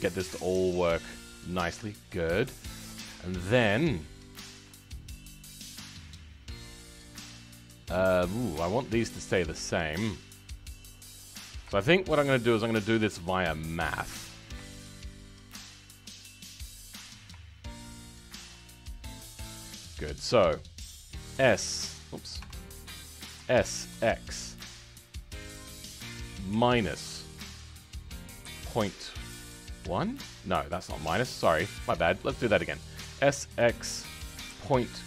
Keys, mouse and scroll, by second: 0.1-0.9 scroll up 2, 0.9-7.5 shift+middle drag, 7.5-8.1 scroll down 2, 8.1 shift+middle click, 8.8-9.4 scroll up 2, 9.4-11.3 shift+middle drag, 11.3-11.7 scroll down 2, 11.7-12.7 shift+middle drag, 12.7 ctrl+click, 13.0 shift+middle click, 13.5-13.9 scroll up 7, 13.9-15.7 middle drag, 15.7 shift+click, 16.2-16.7 scroll down 2, 16.7-18.2 scroll up 6, 18.2 shift+click, 18.6-19.6 middle drag, 19.6-20.2 scroll down 2, 20.2 middle click, 20.7-21.3 scroll down 1, 21.3 s, 22.7-23.4 scroll up 3, 23.4 s.